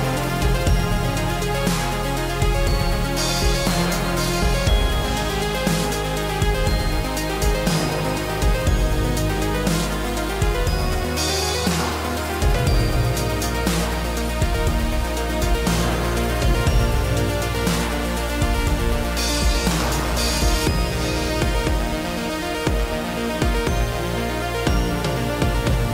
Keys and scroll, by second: 0.0 ctrl+g.